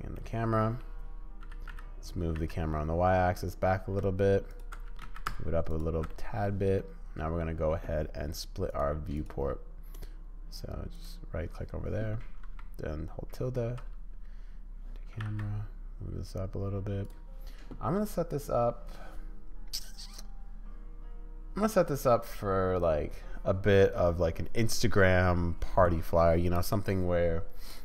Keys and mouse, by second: 0.1 middle click, 1.4 g, 4.8 g, 6.1 middle click, 6.8 middle click, 9.1-11.1 drag, 15.1 g, 27.7 click.